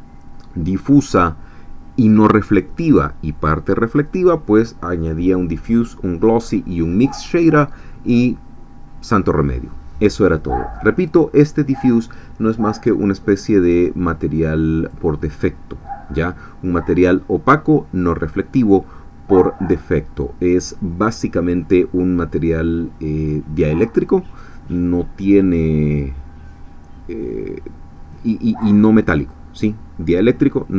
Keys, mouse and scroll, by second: 14.1-30.7 drag.